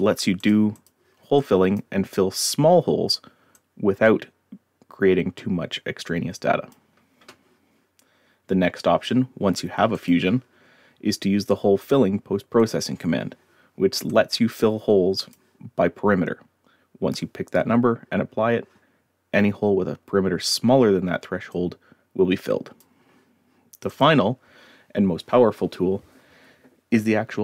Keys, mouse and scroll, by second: 0.4 click, 0.7 click, 1.4-1.7 drag, 2.6-3.0 scroll up 1, 3.5-6.7 drag, 10.0 click, 12.6 click, 14.1-15.3 drag, 21.5-22.8 drag, 23.9 click.